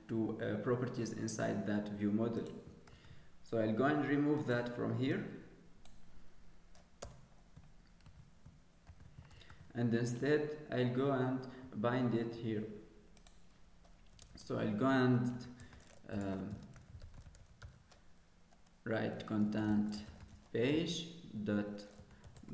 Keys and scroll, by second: 8.0 ctrl+x, 8.8 ctrl+s.